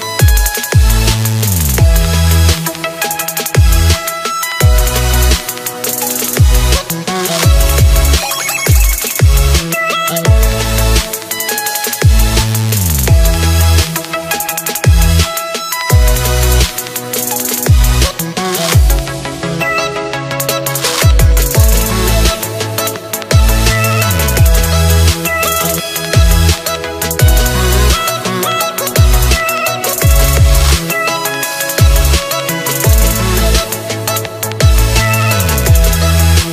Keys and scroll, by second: 15.7 ctrl+s.